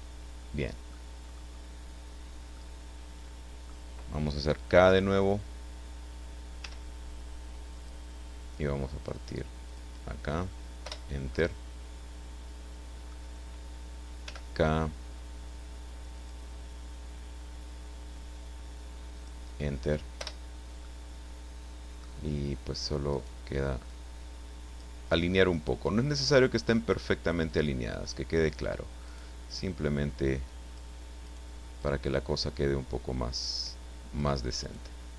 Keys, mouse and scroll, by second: 1.1 scroll down 1, 1.2-1.7 scroll up 1, 1.7-2.5 scroll down 1, 2.5-3.8 middle drag, 6.6 k, 7.7 click, 9.6 click, 11.1 Return, 11.3-12.7 drag, 12.7 middle click, 14.2 k, 16.2 click, 19.1 click, 20.2 Return, 20.8-22.2 middle drag, 23.1 right click, 23.8 click, 25.5 right click, 26.2 click, 27.4 click, 29.0 right click, 29.5-30.9 drag, 31.2 right click, 31.8-34.4 drag, 34.6 right click.